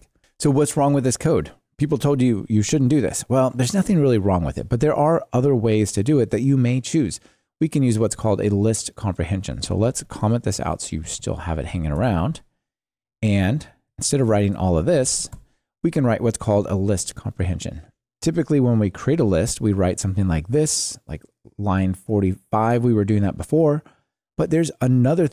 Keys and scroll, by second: 9.8 super+c, 10.1 super+/, 12.3 super+v, 15.3 Delete.